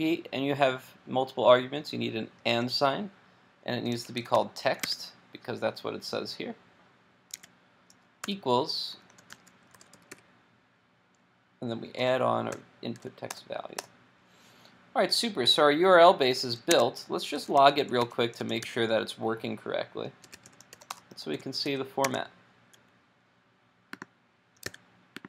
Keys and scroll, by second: 4.8 super+Tab, 21.7 super+s, 22.1 super+Tab, 24.7 super+r.